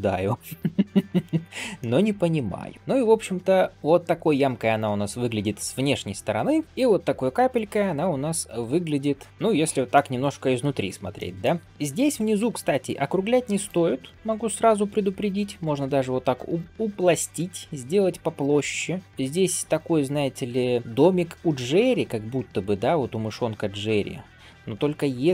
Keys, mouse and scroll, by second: 1.6 middle click, 2.3 click, 2.6 middle click, 3.1-6.5 middle drag, 6.6 alt+b, 6.6 middle click, 7.0 scroll up 2, 7.4-7.9 middle drag, 8.1 shift+middle drag, 8.4 scroll up 1, 8.7 middle click, 9.1 scroll down 1, 9.3 scroll up 1, 9.6 scroll down 1, 9.8-10.5 middle drag, 10.6 scroll up 2, 11.0 middle drag, 11.5 Tab, 12.2 g, 14.0 click, 14.5 g, 15.4 click, 15.8 g, 16.8 scroll up 1, 17.0 click, 17.4 g, 18.1 click, 18.4 g, 19.6 middle click, 20.2-20.6 scroll down 1, 20.6-21.7 scroll up 1, 21.9 d, 22.2-25.2 drag.